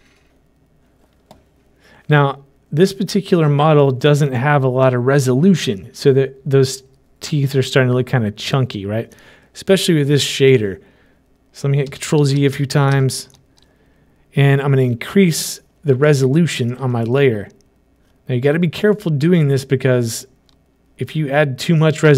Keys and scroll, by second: 12.4 ctrl+z.